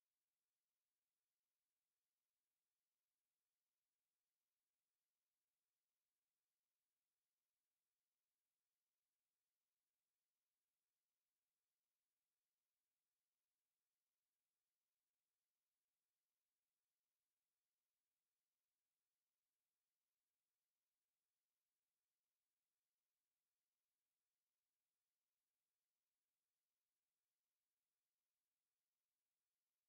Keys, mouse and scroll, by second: 1.0 click, 2.6 click, 3.9-5.7 drag, 6.9 click, 10.7 click, 11.8 click, 15.4-18.0 drag, 20.0 click, 22.7 click, 24.5 click, 25.3 right click, 26.3 click, 27.5 click, 29.1 KP_3, 29.4 KP_0, 29.7 KP_Enter.